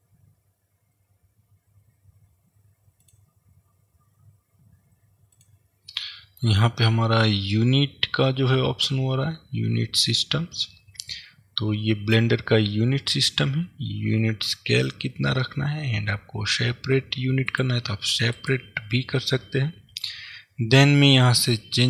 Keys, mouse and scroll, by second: 6.1-17.7 middle drag, 17.7 click, 18.4 click.